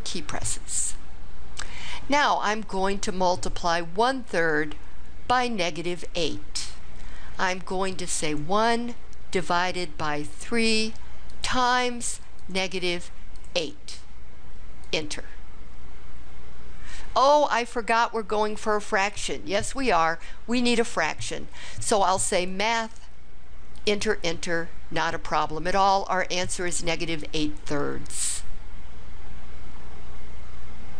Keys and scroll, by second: 8.3 1, 9.3 /, 10.4 3, 11.4 *, 13.4 8, 14.9 Return, 23.8 Return, 24.0 Return.